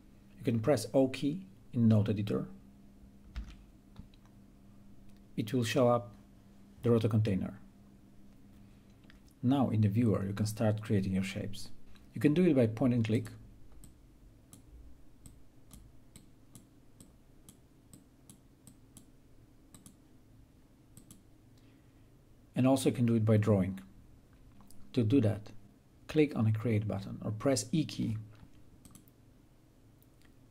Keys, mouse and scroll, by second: 3.6 o, 9.0-13.4 right drag, 13.4-23.5 drag, 28.4 click.